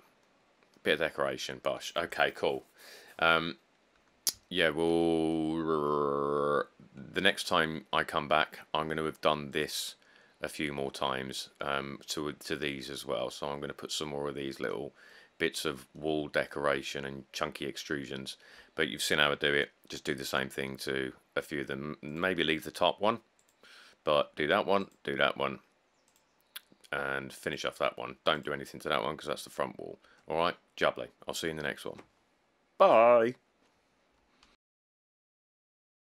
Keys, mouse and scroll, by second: 0.3-2.2 middle click, 0.6 scroll, 1.2-2.0 scroll, 3.6-4.0 middle click, 3.7 scroll.